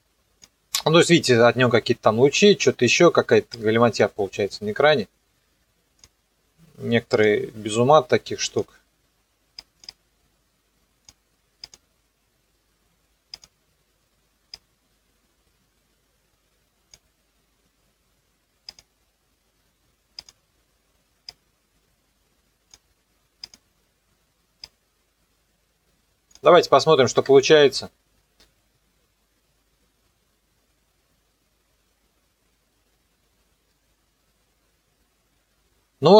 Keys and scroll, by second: 27.2 KP_0, 28.7 KP_0, 35.4 KP_0.